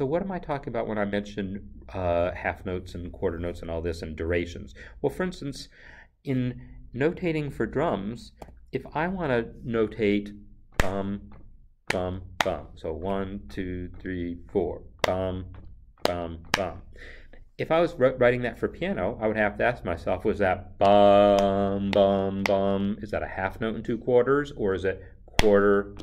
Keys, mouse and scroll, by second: 1.1 click, 8.4 click.